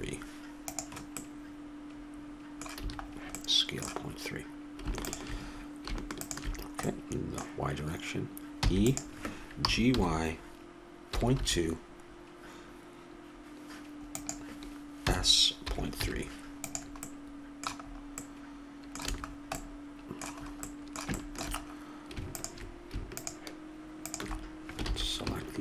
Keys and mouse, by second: 1.5 click, 3.2 a, 5.3-7.2 drag, 6.9-8.4 middle drag, 8.9 e, 9.9 g, 15.4 s, 17.4-18.7 middle drag, 19.4 a, 22.6-25.6 drag, 25.2 ctrl+z.